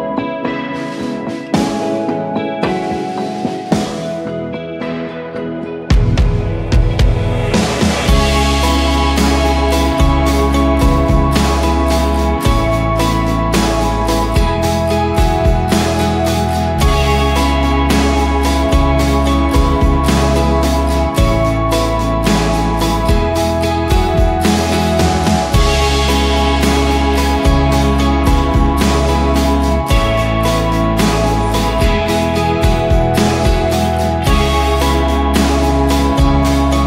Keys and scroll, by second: 0.0-0.2 typing, 2.0 ctrl+d, 2.7 ctrl+], 3.1 Left, 3.2 Left, 3.3 Left, 3.5 Left, 3.5 Left, 3.6 Left, 3.8 Left, 3.8 Left, 4.0 Left, 4.1 Left, 4.2 Left, 4.5 Up, 4.8 Up, 5.3 Left, 6.8 ctrl+j, 7.0 ctrl+[, 8.3 ,, 8.8 Return, 11.0-11.8 typing, 13.8 ctrl+d, 14.1 shift+Right, 15.0 shift+Right, 15.0 shift+Left, 15.8 ctrl+j, 16.5 ctrl+[, 18.0 typing, 18.3 Return, 19.3-20.1 typing, 22.1 ctrl+d, 22.4 Right, 22.5 Right, 22.6 Right, 22.7 Right, 22.8 Right, 24.0 ctrl+j, 24.4 ctrl+[, 25.5-27.0 typing, 29.0-29.7 typing, 34.5 ctrl+d, 35.0 shift+Left, 35.3 shift+Left, 35.6 shift+Right.